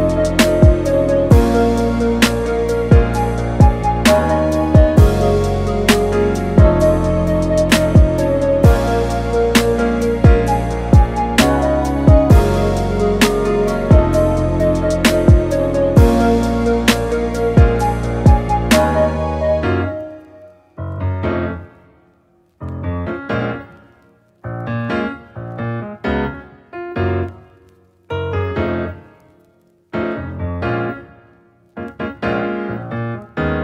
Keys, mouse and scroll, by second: 1.9 click, 2.8 Tab, 3.4 click, 3.7-4.7 middle drag, 4.7-5.7 scroll down 3, 5.7-6.4 scroll down 1, 6.4-14.8 drag, 15.4-25.5 middle drag, 25.5-26.3 scroll up 3, 26.3-29.3 scroll down 3, 29.3-31.4 scroll down 1, 31.4 click.